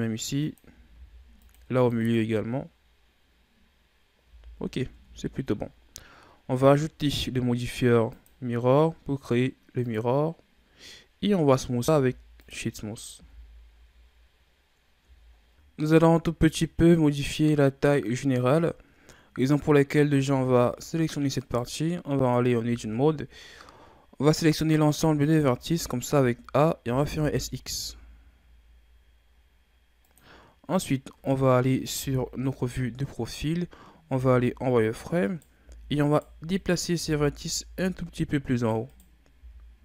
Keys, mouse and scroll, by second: 0.9 ctrl+r, 1.9 click, 4.3 z, 4.9 Tab, 4.9-6.1 scroll down 4, 6.1-8.0 scroll down 6, 8.0-10.4 drag, 10.4-11.7 scroll up 5, 11.7 w, 13.1 a, 13.7-15.3 scroll down 7, 15.3 shift+scroll up 3, 15.5 click, 19.0-19.9 scroll up 4, 20.1-20.6 shift+scroll down 4, 20.6-21.3 scroll up 2, 21.3 right click, 22.5 Tab, 24.8 a, 25.3 a, 25.5 a, 26.7 s, 31.9 KP_3, 33.4-34.1 scroll up 2, 34.1 z, 35.1 right click, 35.5 b, 36.4 right click, 36.9 c, 39.3 g.